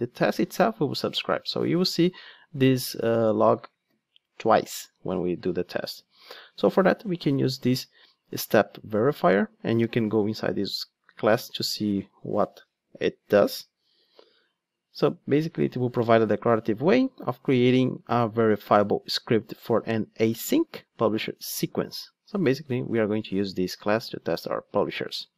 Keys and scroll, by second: 8.3 Return, 9.7 super+b, 22.6 ctrl+Tab.